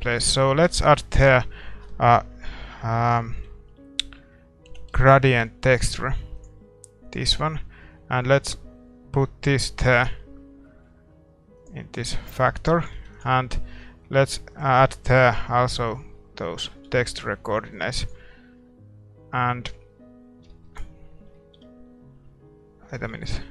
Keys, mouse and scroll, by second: 10.6-23.5 middle drag, 16.7 ctrl+t, 17.7-23.5 drag.